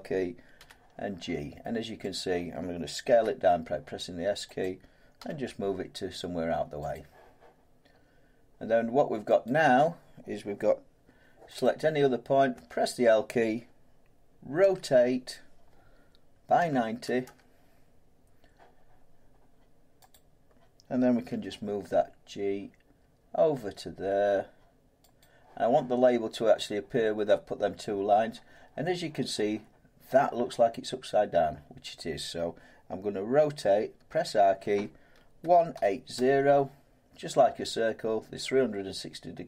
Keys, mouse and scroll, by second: 0.6 g, 2.1 click, 3.1 s, 4.6 click, 5.2 g, 6.9 click, 9.4 click, 11.6 click, 12.5 l, 14.6 r, 16.6-17.2 typing, 20.1 click, 21.3-21.7 typing, 25.2 click, 26.2 click, 27.1-30.2 drag, 34.1 r, 35.4-36.1 typing.